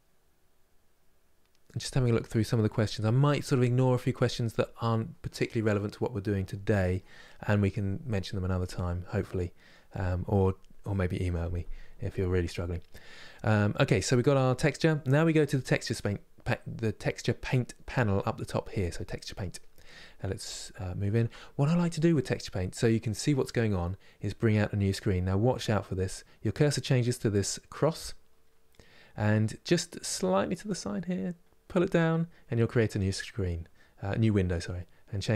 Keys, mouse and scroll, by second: 6.9-15.7 middle drag, 15.7 click, 32.7-35.3 drag.